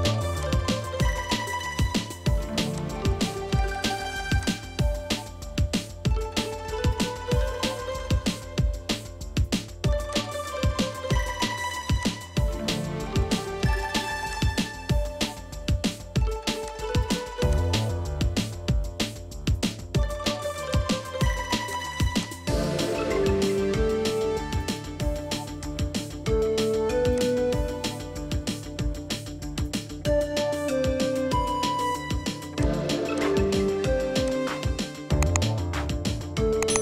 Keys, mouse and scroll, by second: 4.9 scroll down 1, 11.3 Escape, 11.5 Escape, 12.3-13.1 scroll up 1, 22.8-23.4 scroll up 1.